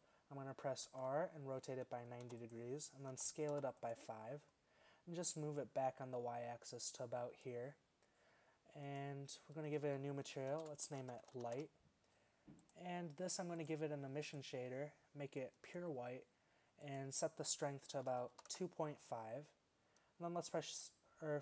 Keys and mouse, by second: 0.9 r, 3.2 s, 8.9 click, 12.7-14.1 drag, 16.9-18.6 drag.